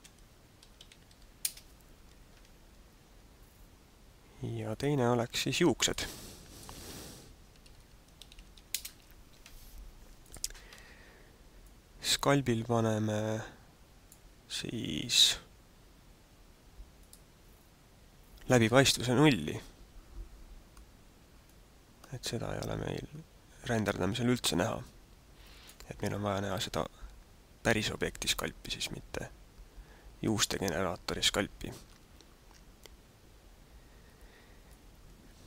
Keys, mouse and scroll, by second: 4.6 click, 5.8 click, 6.5 click, 10.2 click, 11.6 click, 17.1 click, 21.5 click, 24.9 click, 34.9 click.